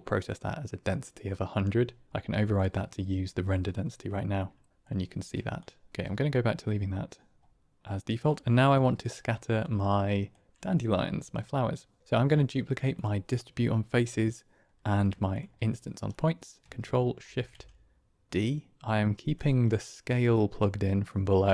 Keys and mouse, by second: 2.4 click, 3.9 middle click, 4.2-5.0 middle drag, 5.8 typing, 8.9 middle click, 9.5 click, 15.3 shift+click, 16.1 click, 17.1 ctrl+shift+d, 19.7 click, 20.3 click.